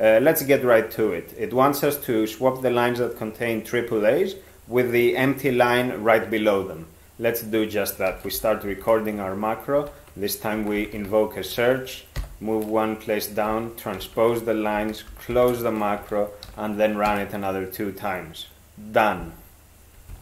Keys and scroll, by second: 8.1 ctrl+x, 8.7 (, 9.7 ctrl+s, 10.6 a, 10.8 a, 11.0 a, 12.2 ctrl+n, 13.5 ctrl+x, 14.0 ctrl+t, 14.8 ctrl+x, 15.3 ), 16.0 ctrl+2, 16.5 ctrl+x, 17.1 e.